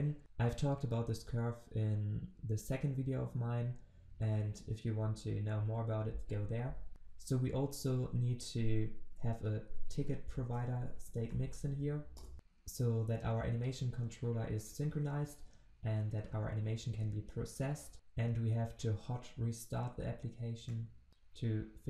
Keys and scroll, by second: 6.9 ctrl+z, 12.2 Return, 17.9 ctrl+shift+\.